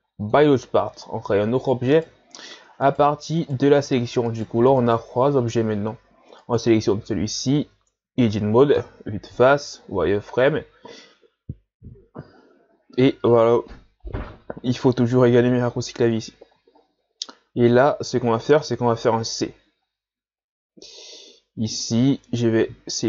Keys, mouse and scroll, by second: 1.1-1.5 scroll down 1, 1.5-1.9 scroll up 3, 1.9 right click, 2.5 Tab, 2.8 right click, 3.4 right click, 4.3 right click, 4.8 right click, 6.4 right click, 7.6 Tab, 8.8 KP_1, 9.9 z, 10.2 scroll up 4, 11.7-12.0 scroll down 1, 12.4-12.8 shift+scroll down 1, 15.2 scroll down 1, 16.8-17.4 shift+scroll up 3, 17.8-18.7 ctrl+scroll up 1, 18.8 c.